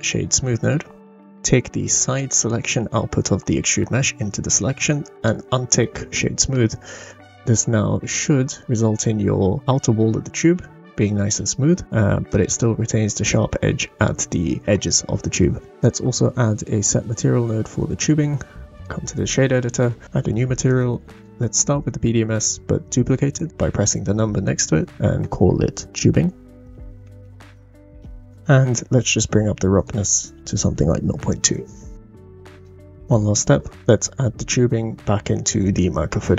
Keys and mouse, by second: 1.8-4.0 drag, 5.2 click, 7.7-8.2 middle drag, 12.3 middle click, 15.7 shift+a, 18.7 click, 20.7 click, 23.3 click, 24.9-28.2 drag, 29.7-31.4 drag, 31.9 middle click, 33.7 click, 33.7-34.2 middle drag, 33.7 right click, 33.9 click, 33.9 right click.